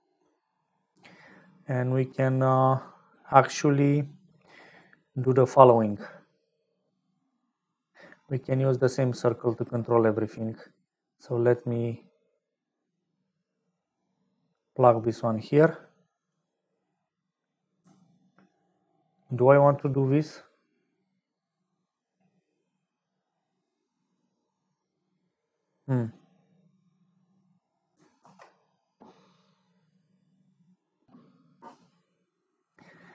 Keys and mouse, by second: 1.8 click, 2.7 click, 3.6 middle click, 5.0 middle click, 9.3-14.6 drag, 16.1 click, 28.1 ctrl+s.